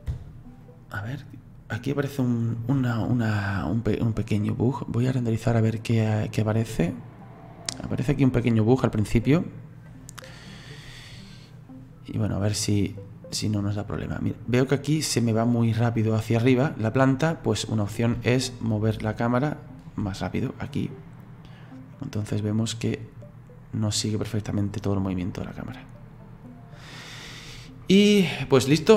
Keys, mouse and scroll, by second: 0.1 space, 0.7-9.2 drag, 10.1-14.6 drag, 18.9-21.3 shift+middle drag, 21.3-24.3 drag, 28.8 click.